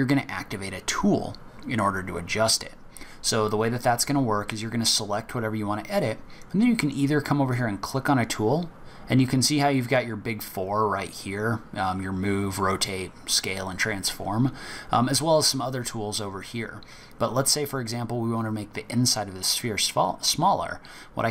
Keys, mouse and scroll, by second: 0.5-3.5 scroll down 1.